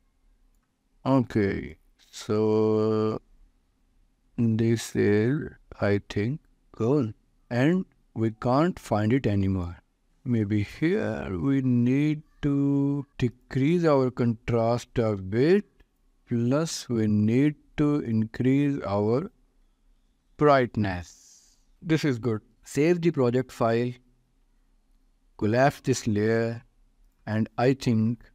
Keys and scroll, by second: 14.9 4, 15.3 5, 15.7 Return, 19.9 6, 20.3 Return, 22.9 ctrl+s.